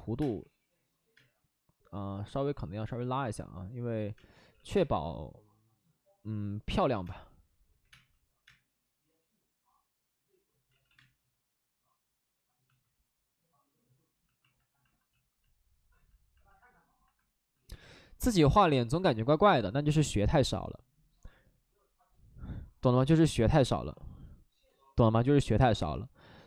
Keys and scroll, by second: 0.1 space, 0.3 3, 1.1 space, 3.1 space, 4.0 space, 4.3 ctrl+z, 4.4 ctrl+z, 4.6 space, 7.0 space, 7.7 5, 7.8 space, 8.4 space, 10.6 ctrl+z, 10.8 ctrl+z, 10.9 space.